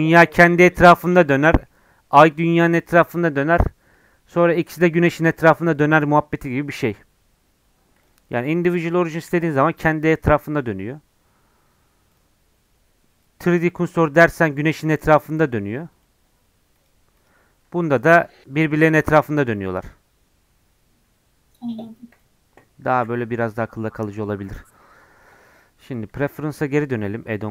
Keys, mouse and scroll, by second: 1.2-8.0 middle drag, 8.0 click, 9.0-9.3 scroll up 2, 9.3 r, 11.2 scroll down 1, 12.1-13.7 drag, 13.7-14.1 scroll down 1, 14.1 r, 16.8 click, 17.5 r, 25.2-27.5 drag.